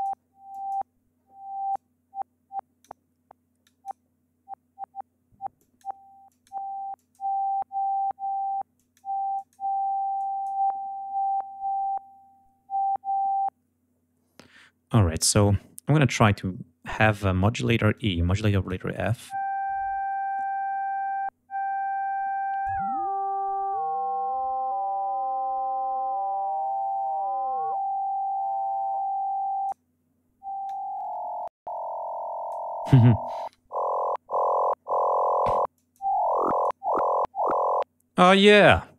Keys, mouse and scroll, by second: 0.4 click, 1.6-2.9 drag, 3.5 click, 5.5 click, 6.2 click, 6.9 click, 8.7 click, 9.2 click, 10.1 click, 17.8 click, 22.5-29.8 drag, 30.6-32.6 drag, 35.6 click, 36.3 click.